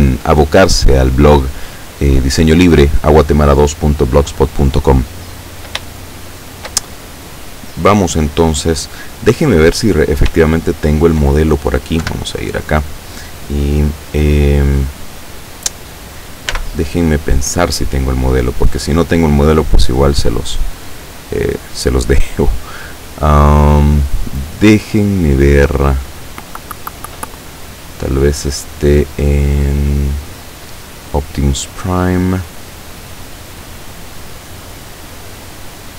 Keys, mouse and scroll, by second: 6.0-6.9 shift+middle drag, 9.0 click, 10.6-11.3 shift+middle drag, 12.1 KP_7, 16.6 n, 18.2 click, 20.8 click, 21.6 click, 22.6 click, 30.8 click, 34.0 click, 34.7 click.